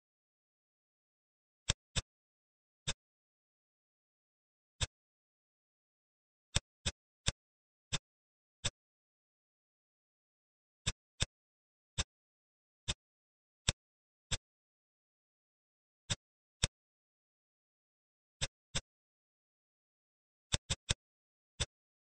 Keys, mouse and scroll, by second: 1.7 middle click, 2.6 shift+click, 3.3 shift+d, 5.6 shift+d, 6.8 click, 7.2 click, 7.9 click, 8.6-10.1 middle drag, 10.1 s, 11.1-11.9 middle drag, 11.9 click, 12.9 click, 14.3-14.9 middle drag, 14.9 s, 16.6 click, 18.4 click, 18.6-20.2 middle drag, 20.4 click, 20.6 click, 20.8-21.5 middle drag, 21.5 click.